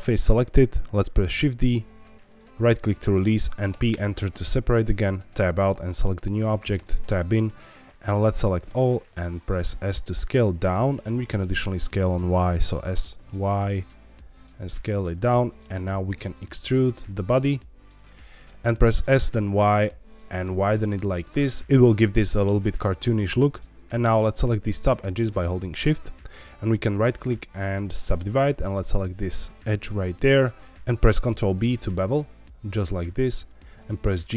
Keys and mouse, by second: 0.1 middle click, 1.4 shift+d, 3.7 p, 5.0 Tab, 6.7 Tab, 8.7 a, 9.1 s, 10.8 click, 11.0 middle click, 12.5 s, 13.1 y, 15.0 click, 15.3 middle click, 15.8 e, 17.9 click, 18.2 middle click, 19.2 y, 24.4 click, 25.1 shift+click, 28.6 click, 30.6 ctrl+z, 31.3 ctrl+b, 33.6 click, 34.3 g.